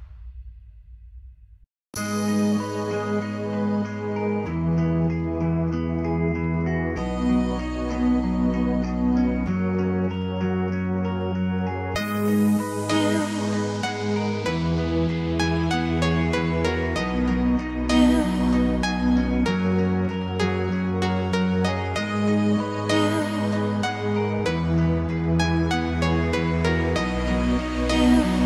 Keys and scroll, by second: 2.5 Escape, 6.8 m, 19.8 Escape, 22.0 Escape.